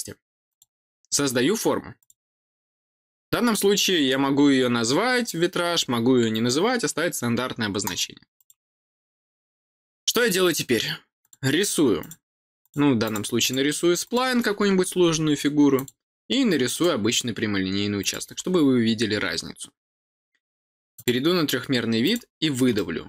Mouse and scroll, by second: 0.4 click, 1.9 click, 8.3 click, 11.2 click, 11.9 click, 12.6 click, 13.0 click, 13.4 click, 14.0 click, 15.7 click, 16.7 click, 17.9 click, 20.9 click, 22.0 click, 22.7 middle click.